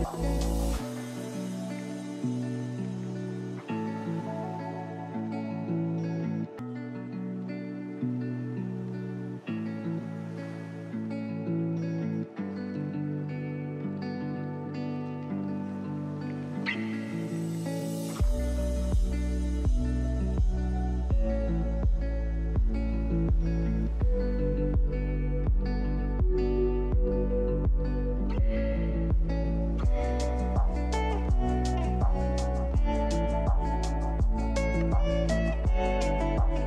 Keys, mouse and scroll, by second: 0.0 click, 0.9 middle click, 1.0 scroll down 4, 1.1 scroll up 1, 1.3 click, 1.5 click, 2.5 click, 2.8 click, 3.0 click, 3.2 click, 3.3 click, 5.3 middle click, 5.5 middle click, 14.0 middle click, 14.6 click, 17.3-18.4 drag, 18.4 middle click, 18.7 middle click, 19.6 click, 19.7 middle click, 20.5-22.7 middle drag, 22.2 click, 22.7 scroll up 1, 22.8 shift+middle click, 22.9 scroll down 3, 23.0 middle click, 23.2 scroll up 1, 23.3 scroll, 23.4 shift+middle click, 24.3 click, 24.3 click, 24.5 scroll down 2, 25.3 shift+click, 26.2 click, 27.1 click, 27.7 click, 29.3 alt+click, 30.2 e, 32.2 e, 33.7 g, 35.0 click, 36.1-36.4 scroll up 7, 36.2 shift+middle click, 36.4-36.6 shift+middle drag.